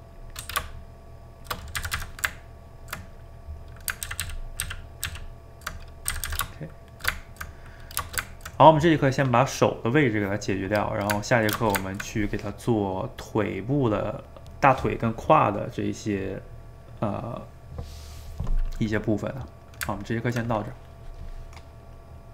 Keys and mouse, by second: 0.4 g, 1.8 a, 2.0 a, 2.4-4.1 ctrl+middle drag, 4.1 ctrl+z, 4.3 ctrl+z, 4.7 ctrl+z, 5.1 ctrl+z, 6.2 a, 6.3 a, 6.5 shift+middle click, 6.9 shift+right click, 7.2-14.9 ctrl+middle drag, 18.6-22.3 middle drag.